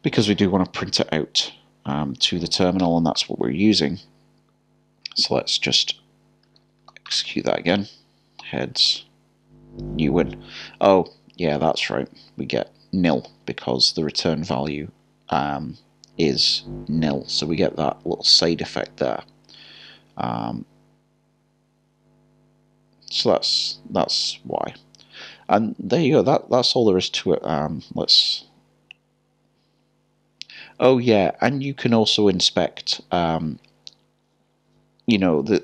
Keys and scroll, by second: 8.4 typing.